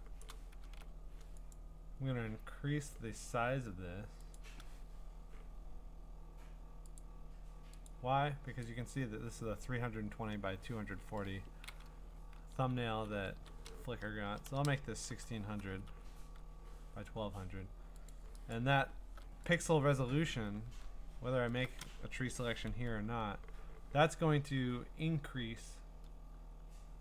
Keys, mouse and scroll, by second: 0.2 click, 1.5 click, 4.3 click, 7.0 click, 7.9 click, 8.9 click, 12.4 Right, 12.8 Left, 13.1 Right, 13.3 Right, 14.2-16.8 typing, 20.3 click, 20.3-21.4 scroll.